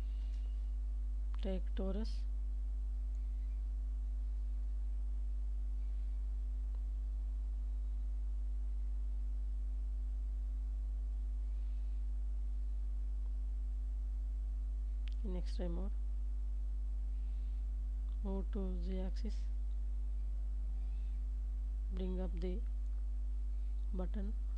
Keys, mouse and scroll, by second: 1.8-8.0 drag, 8.3-10.1 drag, 11.0-13.9 drag, 14.5 middle click, 15.4 g, 15.6 z, 20.6 shift+click, 21.5-22.6 middle drag, 23.2 click.